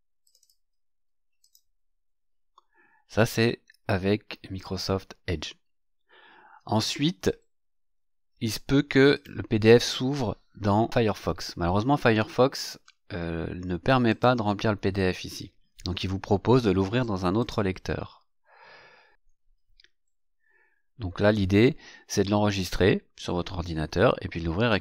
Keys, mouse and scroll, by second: 0.2 click, 1.4 click, 9.1 click, 14.0 click, 17.3 click.